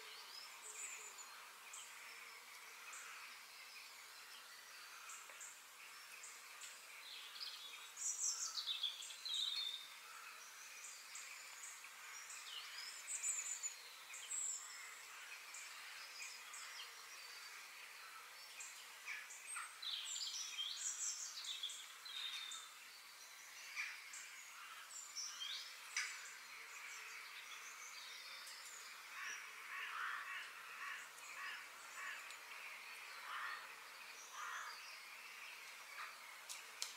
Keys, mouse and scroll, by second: 2.4-2.7 scroll up 1, 2.7-5.5 middle drag, 7.0-8.9 middle drag, 10.1-14.1 middle drag, 16.3 f, 18.1-19.2 middle drag, 19.2-19.9 scroll up 3, 19.9-21.4 shift+middle drag, 21.4 KP_3, 32.8-34.7 middle drag.